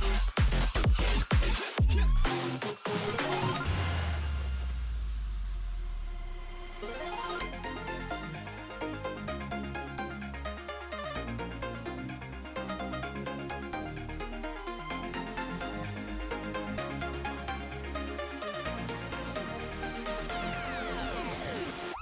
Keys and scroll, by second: 10.9-12.1 typing, 13.5-14.9 typing, 15.0 Return.